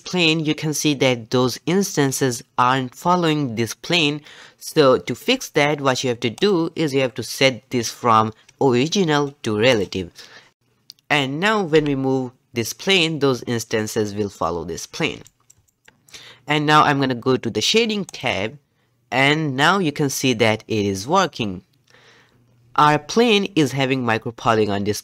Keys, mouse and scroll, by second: 3.1 click, 6.5 click, 9.7 click, 10.6 click, 11.0 g, 11.4 scroll down 1, 11.7 g, 15.4 shift+middle click, 15.9-18.3 scroll down 1, 18.3 click.